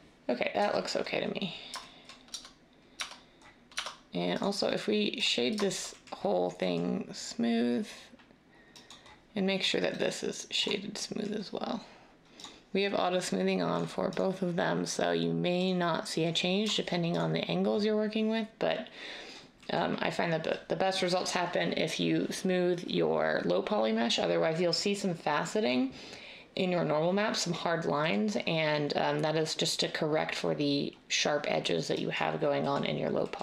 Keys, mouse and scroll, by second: 2.3 Tab, 2.9 Tab, 3.7 Tab.